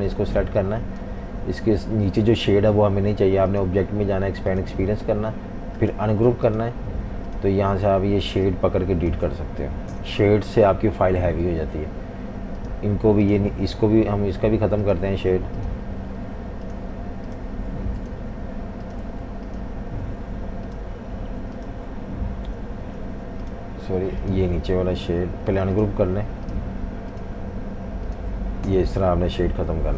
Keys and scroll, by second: 1.9 super+z, 9.9 Delete, 22.5 Delete, 23.1 super+z, 28.7 Delete, 29.5 F19.